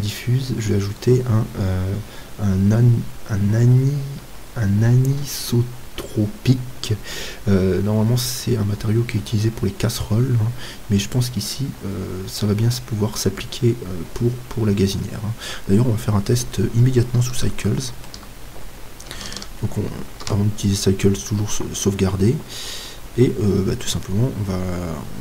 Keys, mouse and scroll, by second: 15.0-15.4 scroll up 1, 15.4-20.0 middle drag, 20.0 ctrl+s.